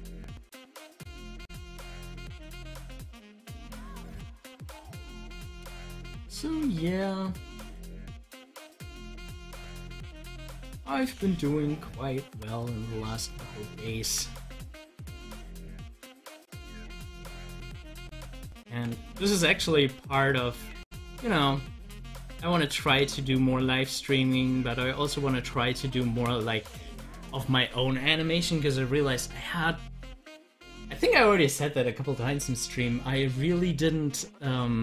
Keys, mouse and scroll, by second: 4.3 ctrl+z, 10.1 click, 11.0 ctrl+z, 14.1 ctrl+z, 15.1-16.7 drag, 16.7 ctrl+z, 17.5 z, 18.0 click, 19.0 ctrl+z, 20.1 click, 20.6 ctrl+z, 22.5 z, 23.7-27.9 drag.